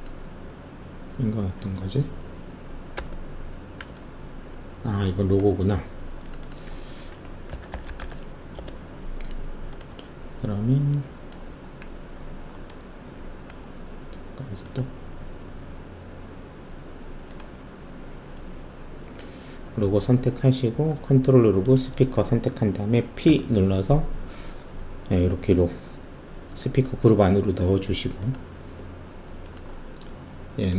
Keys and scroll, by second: 1.7 f, 2.9 4, 7.5-8.0 typing, 8.5 Return, 23.2 ctrl+p.